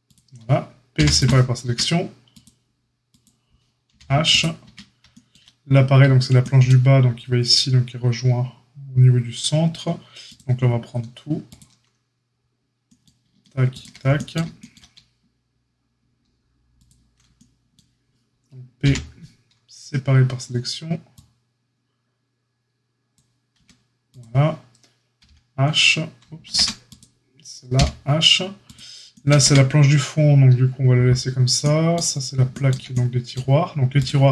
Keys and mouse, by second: 0.9 p, 1.6 Tab, 2.3 click, 2.4 middle click, 3.0 click, 3.2-4.2 middle drag, 3.8 h, 4.2 click, 4.3-10.2 middle drag, 4.6 Tab, 10.2 click, 10.5-13.6 ctrl+middle drag, 13.6 shift+click, 13.7-33.9 shift+middle drag, 18.8 p, 23.5 Tab, 25.2 h, 26.4 ctrl+z, 27.7 h, 29.4 Tab, 33.9 click, 34.0-34.3 middle drag.